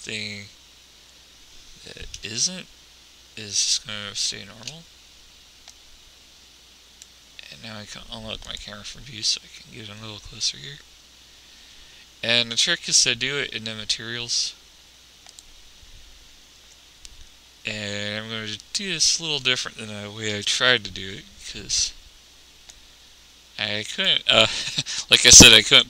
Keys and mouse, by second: 6.0 click, 7.4 click, 7.9 middle click, 9.7-10.7 drag, 15.6-17.2 middle drag, 20.6 n, 23.1 click.